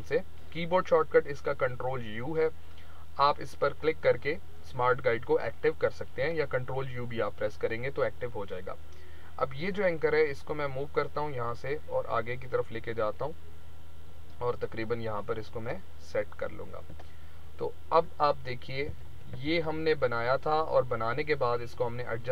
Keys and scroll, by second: 18.8 ctrl+-.